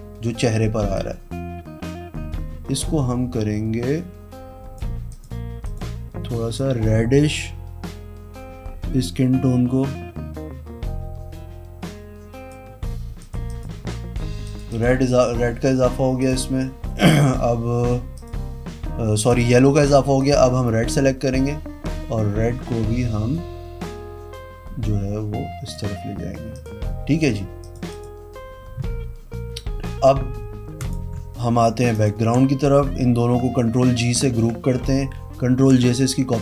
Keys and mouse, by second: 0.9-4.7 drag, 5.0 click, 18.1 click, 19.2 click, 20.1 click, 20.9 click, 26.5 click, 27.6 click, 27.9 click, 30.7 click, 31.9 ctrl+click, 34.2 ctrl+g, 35.4 ctrl+l.